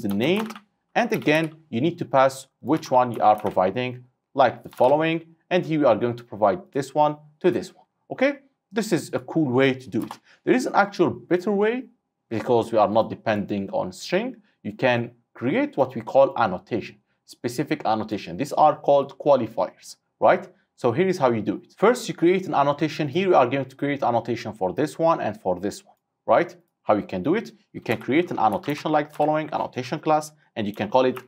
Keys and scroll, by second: 3.1 ctrl+w, 3.5 ctrl+c, 4.8 ctrl+v, 29.2 Return.